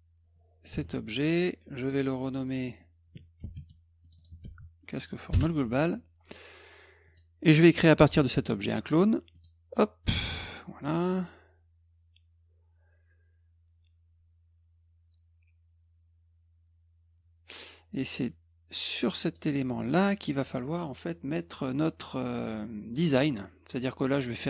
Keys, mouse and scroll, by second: 0.7 ctrl+g, 1.8 click, 2.5 click, 2.6 click, 3.4 ctrl+c, 4.1 click, 4.2 click, 4.5 ctrl+v, 5.3 Return, 7.1 click, 9.4 click, 18.2-19.4 drag, 23.0 click.